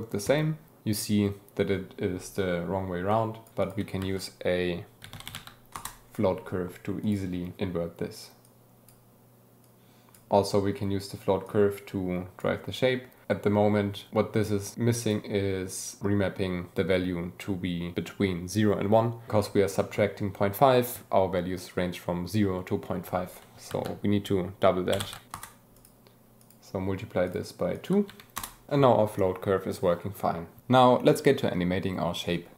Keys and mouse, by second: 3.1-3.4 drag, 3.6 click, 3.6 g, 3.9 shift+a, 7.0 click, 8.4 click, 9.6 click, 11.4-12.5 drag, 14.6 click, 19.7 click, 23.7 shift+a, 25.7 click, 26.4-27.3 drag, 27.7 click, 28.7-30.0 drag.